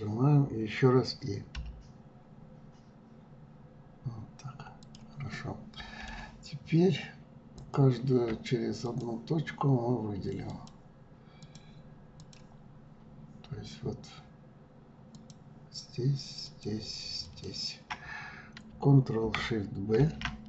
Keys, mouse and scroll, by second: 5.3-7.5 middle drag, 7.5 click, 8.8 shift+click, 10.5 shift+click, 11.4 shift+click, 12.2 shift+click, 15.1 shift+click, 16.4 shift+click, 17.2 shift+click, 20.0 ctrl+shift+b.